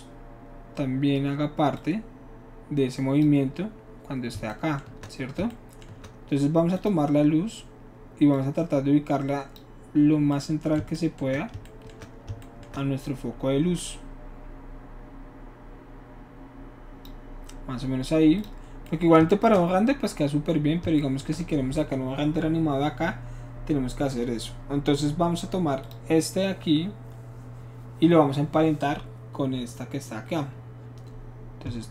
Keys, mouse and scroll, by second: 1.7-3.2 drag, 6.8 shift+click, 8.3-9.6 drag, 13.8-17.1 shift+drag, 18.4 click, 25.8 click.